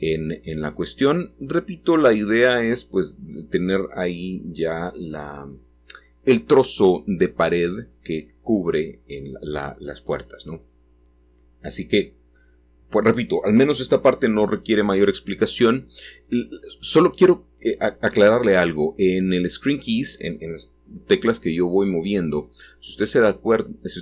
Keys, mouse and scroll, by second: 1.5 s, 2.9 shift+click, 7.0 s, 9.6-18.4 drag, 18.4-19.3 scroll down 1, 19.3-24.0 scroll down 1.